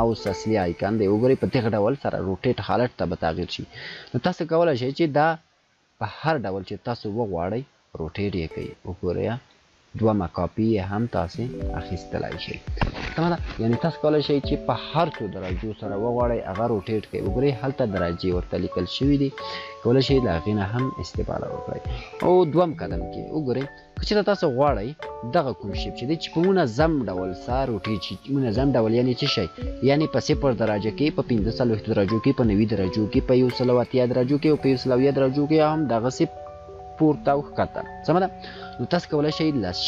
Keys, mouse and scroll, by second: 4.6-5.9 space, 14.1-21.1 alt+drag, 22.5 ctrl+z, 23.4 ctrl+z, 24.9 click.